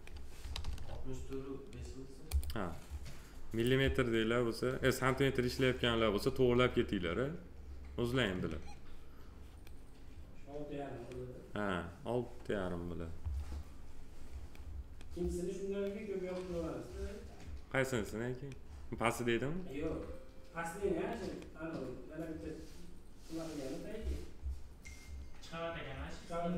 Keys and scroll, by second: 0.6 alt+x.